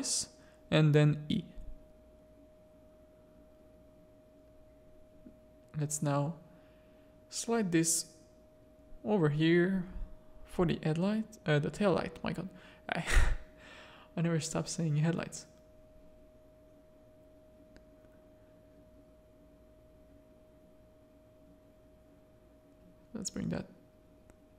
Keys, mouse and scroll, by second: 2.7 z, 3.4 z, 3.8 a, 4.1 click, 4.9 z, 6.6 z, 8.3-10.3 drag, 10.7 Tab, 11.1 Tab, 11.6 z, 12.4 click, 13.2 z, 16.7 click, 16.8 Tab, 17.4 alt+a, 17.9 Tab, 18.5 Tab, 19.3 Tab, 19.6 z, 19.9 a, 20.7 click, 21.6 z, 22.4-23.6 drag, 23.8 Tab, 24.3 Tab.